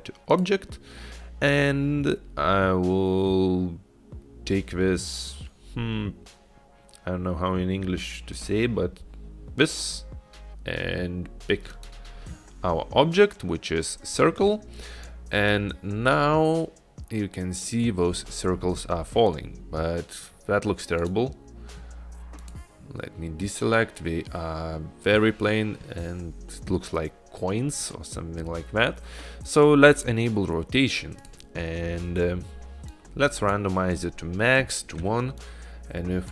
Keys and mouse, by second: 15.4-17.7 drag, 21.0 click, 30.1 click, 31.2 click, 33.0 click, 35.7 click.